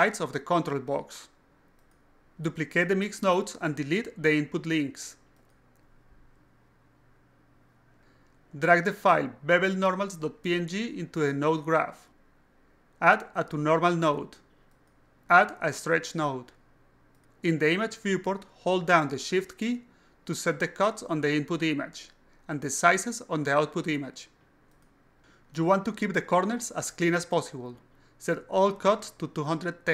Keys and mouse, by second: 1.6 click, 1.7 click, 2.0 click, 2.3 click, 3.2 shift+click, 4.5-5.8 alt+drag, 6.3 click, 6.9 click, 7.1 click, 7.6 click, 9.0 click, 9.5 click, 10.5 click, 11.9 click, 14.2 click, 14.9 click, 15.8 click, 16.6 click, 19.2-22.4 shift+drag, 23.1-24.9 shift+drag, 25.5-27.4 shift+drag, 28.1-29.9 shift+drag.